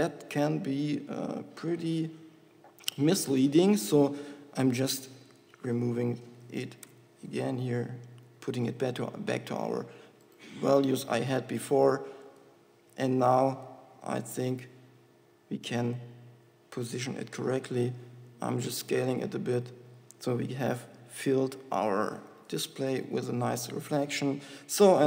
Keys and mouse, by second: 4.6-7.6 drag, 11.0-12.8 drag, 13.7 g, 15.9 g, 17.6 g, 19.1 s, 22.6 g.